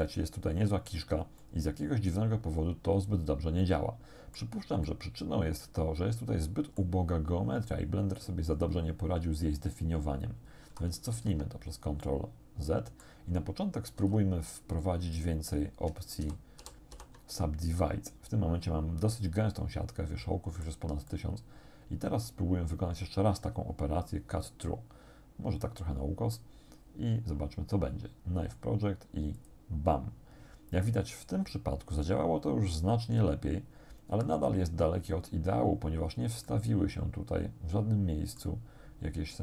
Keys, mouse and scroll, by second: 1.4-4.6 drag, 4.9-7.0 drag, 11.2 ctrl+z, 12.0-13.2 drag, 14.0 w, 15.2 click, 16.2 shift+r, 17.8-20.9 drag, 21.1-26.6 drag, 29.4 click, 35.9-36.2 scroll up 1, 36.5-38.6 drag.